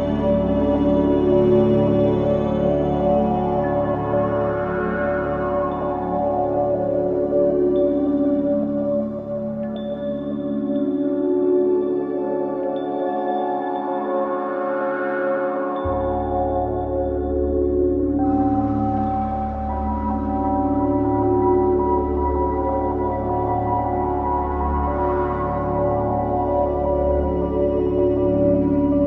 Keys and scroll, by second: 5.5 F1, 6.6 ctrl+z, 13.6 Delete, 18.7 Escape, 22.1 Escape, 27.3 Escape.